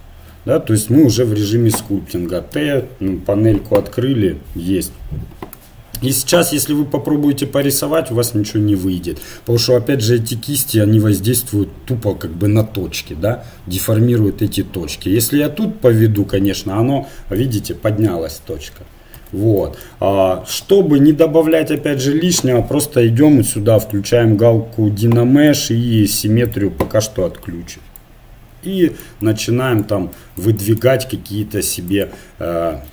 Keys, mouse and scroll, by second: 2.5 t, 6.9 f, 8.0-9.9 drag, 15.4-17.1 drag, 19.1 ctrl+z, 20.5 KP_7, 23.8-32.9 drag.